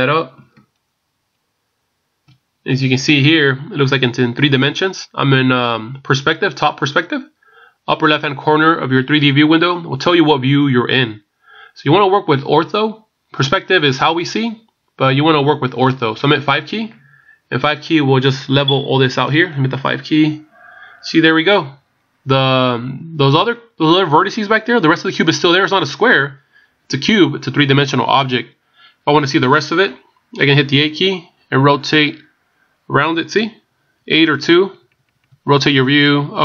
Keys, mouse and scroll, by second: 0.6-1.8 shift+scroll down 4, 20.2 KP_5, 31.8 KP_8, 32.1 KP_8, 33.4-34.4 KP_2, 34.4 KP_8.